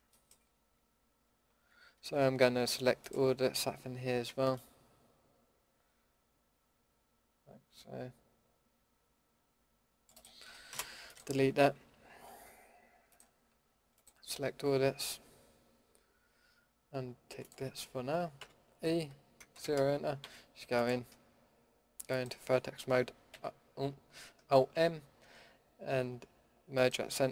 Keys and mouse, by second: 3.0-7.0 drag, 4.2 c, 10.2 drag, 10.7 Delete, 18.4 e, 20.2 s, 23.3 alt+n, 24.7 alt+m.